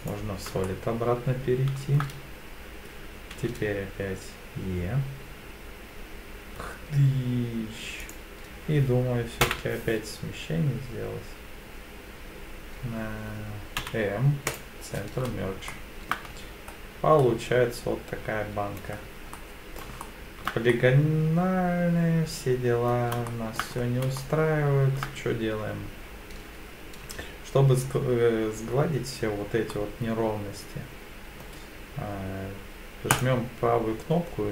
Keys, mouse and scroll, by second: 0.6-2.0 shift+middle drag, 3.3 e, 3.9 s, 8.0 click, 9.4 m, 13.8 m, 15.7 shift+middle click, 16.3 Tab, 16.7-17.7 scroll down 2, 17.2-18.8 middle drag, 19.0-19.4 scroll down 2, 19.4-19.8 middle drag, 20.0-20.5 shift+middle drag, 20.7-22.9 middle drag, 23.3-23.6 shift+middle drag, 23.8 scroll up 2, 24.2-25.0 shift+middle drag, 29.7-31.4 middle drag, 33.1-34.5 right drag.